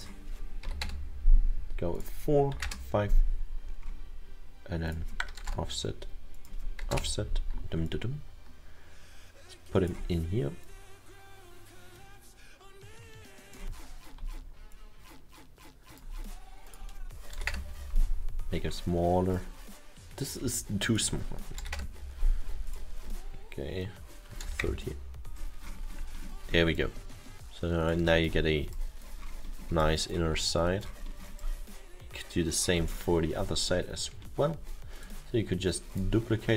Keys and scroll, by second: 0.7 4, 1.6 Return, 2.7 Return, 5.5 0, 5.7 Return, 7.0 Return, 17.5 Return, 21.6 1, 21.8 Return, 24.5 0, 24.7 Return.